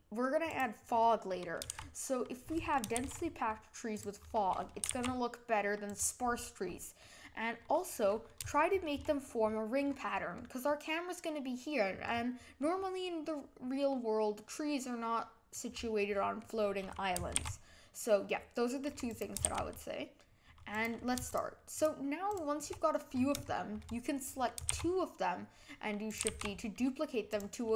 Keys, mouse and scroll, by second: 1.0-1.7 middle drag, 1.7 shift+e, 2.9 shift+d, 4.2-4.8 middle drag, 4.8 g, 7.0-8.0 middle drag, 8.0-8.5 scroll up 3, 8.5-9.9 shift+middle drag, 9.9-10.7 scroll up 3, 10.7-11.9 middle drag, 11.9-12.6 scroll down 7, 12.6-15.6 middle drag, 16.0-17.3 middle drag, 17.3 shift+d, 19.4 shift+d, 21.3 shift+click, 21.7 shift+click, 22.3 shift+click, 23.1 scroll up 4, 23.5-24.7 shift+middle drag, 24.7 shift+d, 26.2 g.